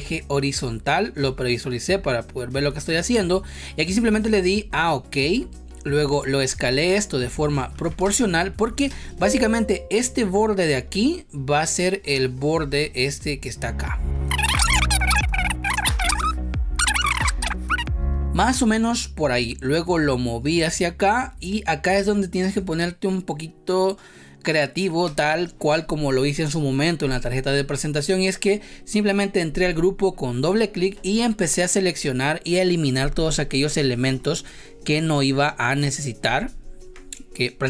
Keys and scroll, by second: 8.1 space, 8.8 space, 14.3 space, 15.3 space, 17.6 space, 18.2 ctrl+z, 25.0 space, 32.9 Delete.